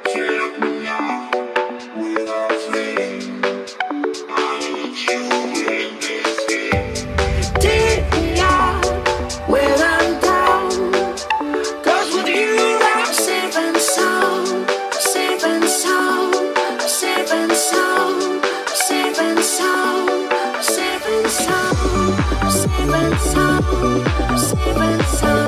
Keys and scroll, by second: 20.8 ctrl+t.